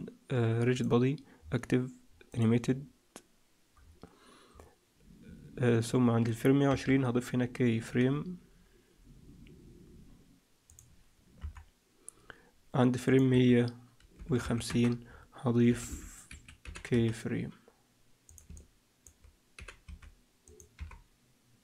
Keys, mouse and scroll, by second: 1.3-2.2 scroll down 1, 2.2 scroll down 4, 2.2 click, 3.7-4.4 scroll down 1, 4.4-5.1 scroll down 4, 5.1-5.4 scroll down 4, 6.6 i, 11.0 scroll down 1, 11.3 KP_1, 13.0 click, 15.0-15.6 scroll down 2, 15.6-16.0 scroll down 2, 15.6 g, 16.6 g, 18.4 middle click, 19.5 g, 20.7 i.